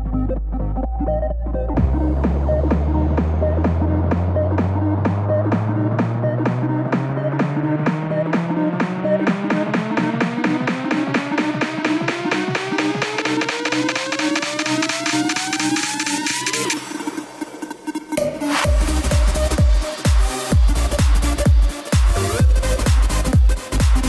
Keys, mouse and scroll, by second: 1.0 click, 1.9 KP_1, 4.8 s, 8.0 z, 8.5 click, 9.2 b, 10.0 s, 15.2 scroll up 1, 15.5 shift+middle click, 15.8-16.6 scroll up 1, 16.6 b, 17.3 b, 18.3 click, 19.1 b, 19.9 click, 21.1 e.